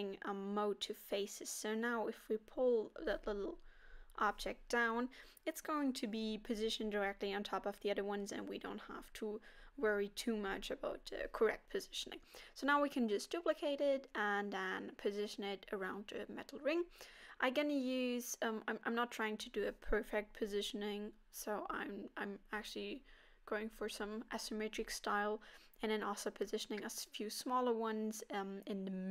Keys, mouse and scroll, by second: 0.4 g, 2.0 middle click, 3.0 middle click, 3.4 scroll up 2, 4.3 g, 6.8 middle click, 9.4-9.8 scroll down 3, 10.0 KP_7, 11.1 shift+d, 17.2 shift+d, 19.6 shift+d, 22.4 shift+d, 24.0 s, 25.2 scroll up 4, 26.1 g, 27.3 shift+d, 28.2 shift+d.